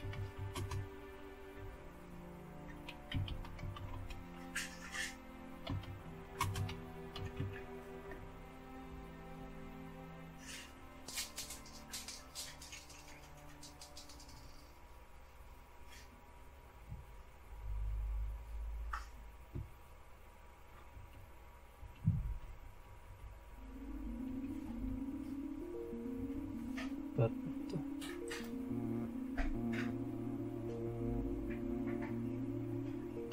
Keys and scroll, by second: 0.0-4.2 typing, 5.4-7.6 typing, 8.1 Return, 11.0-12.0 scroll up 1, 12.0-13.1 scroll up 1, 13.1-16.4 scroll up 1, 16.4-19.3 scroll up 1, 19.3-21.0 scroll up 1, 31.5-33.3 scroll up 1.